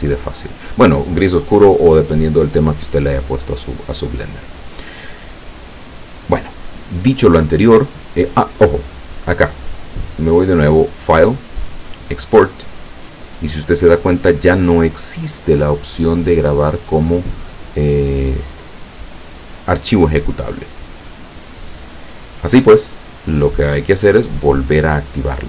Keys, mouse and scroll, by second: 4.7 click, 9.2 click, 10.9 click.